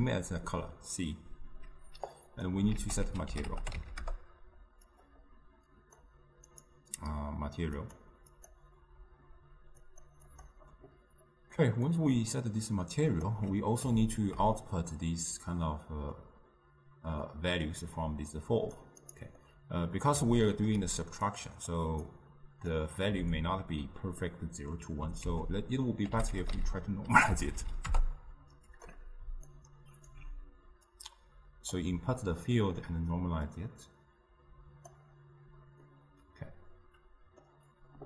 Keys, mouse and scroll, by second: 4.1 ctrl+a, 8.9-28.0 drag, 28.0 Down, 30.5-31.8 alt+right drag, 31.8 click.